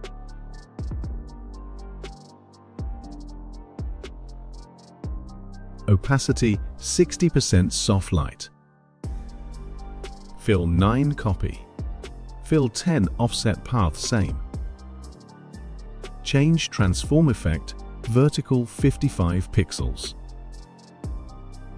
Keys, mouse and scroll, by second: 0.0-2.9 typing, 3.3 click, 7.5 click, 13.2 click, 15.6 click, 19.2 click, 19.7-21.3 typing.